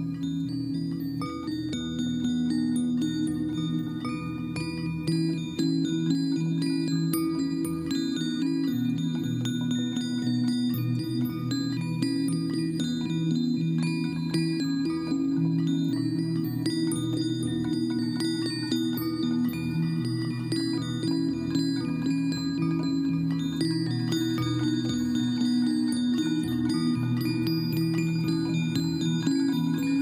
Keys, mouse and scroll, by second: 8.7 click.